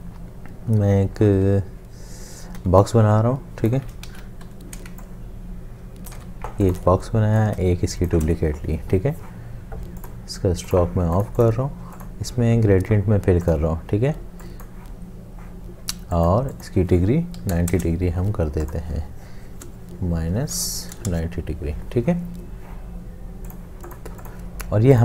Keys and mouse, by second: 2.6 l, 4.1 ctrl+z, 4.5 m, 6.2 v, 7.6 alt+click, 17.4 9, 17.7 Return, 17.7 0, 20.3 Home, 20.8 -, 21.1 Return.